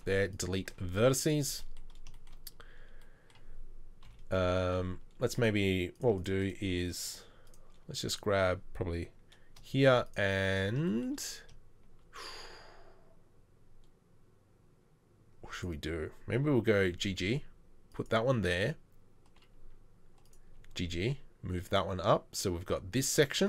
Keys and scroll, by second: 4.1 KP_3, 16.9 g, 20.6 g, 21.5 g.